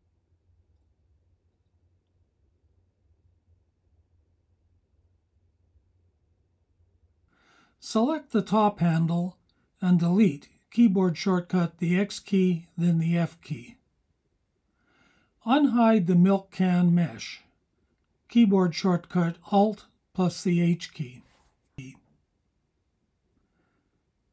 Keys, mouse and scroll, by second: 1.1 click, 2.1 h, 2.9-6.8 alt+drag, 6.7 KP_7, 8.5-12.6 drag, 11.9 x, 15.3 alt+h, 17.0 KP_1, 18.0 KP_Decimal, 23.1 click, 23.9-24.3 drag.